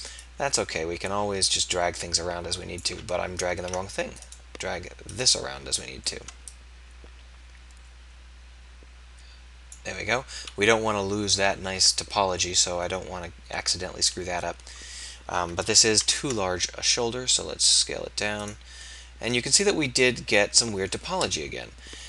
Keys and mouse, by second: 1.5-2.9 drag, 3.7 ctrl+z, 7.0-9.8 drag, 16.2 ctrl+a, 21.5 KP_1.